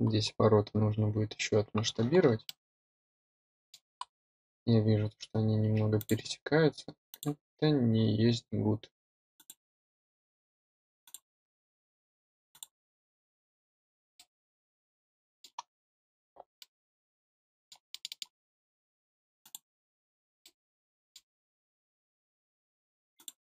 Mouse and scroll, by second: 0.5 middle click, 0.6 middle click, 1.0 middle click, 1.5 middle click, 1.8 middle click, 2.3-3.2 drag, 3.2 middle click, 3.5 middle drag, 3.7 drag, 3.8 middle click, 4.3 click, 4.5 middle click, 4.9 middle click, 5.2-5.6 drag, 5.6 middle click, 5.8 click, 6.1 middle click, 6.4 middle click, 6.7 middle click, 6.9 middle click, 7.1 click, 7.7 middle click, 8.0 click, 8.3 middle click, 8.8 scroll up 2, 9.0 click, 9.6 middle click, 9.7-10.3 scroll down 4, 9.8 middle click, 10.3 middle click, 10.7 middle click, 10.9 scroll up 2, 11.1 middle drag, 11.7 scroll up 4, 12.0 scroll down 2, 13.1 click, 13.5 scroll down 1, 13.6 scroll up 2, 14.1 click, 14.6-15.3 scroll down 6, 14.8 middle click, 15.3 middle click, 16.0-16.6 drag, 16.6 middle click, 17.8-18.1 drag, 18.1 middle drag, 18.5-19.2 drag, 19.2 middle click, 19.5 scroll up 1, 20.0 click, 20.2 scroll up 1, 20.7-23.5 drag.